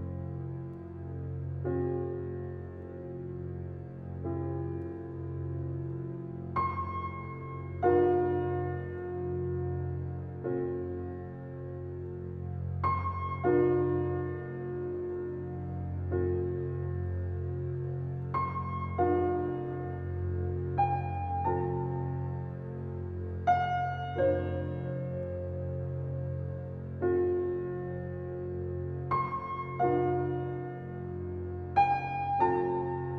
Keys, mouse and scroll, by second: 3.8 click, 16.4 click, 18.2 scroll down 1, 19.2 click, 20.4 ctrl+s, 21.4 scroll down 1, 21.9 alt+click, 22.5 alt+right click, 22.8 alt+click, 23.4 alt+middle click, 23.7 alt+right click, 24.2 alt+click, 24.6 alt+right click, 25.0 alt+click, 25.4 alt+right click, 25.7 alt+click, 27.1 ctrl+s, 28.1-30.1 alt+drag, 32.0 click.